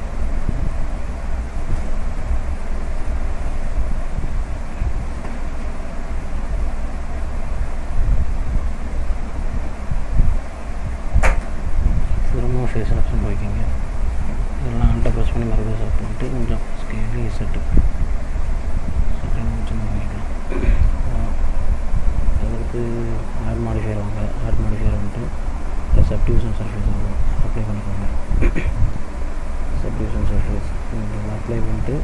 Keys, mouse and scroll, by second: 0.5 middle click, 1.5 click, 2.6 middle click, 5.0 ctrl+z, 6.0 s, 12.4 click, 13.7 click, 14.9 alt+click, 15.5 middle click, 16.9 s, 21.1 click, 22.4 click, 25.1 click, 29.1 middle click, 30.0 middle click.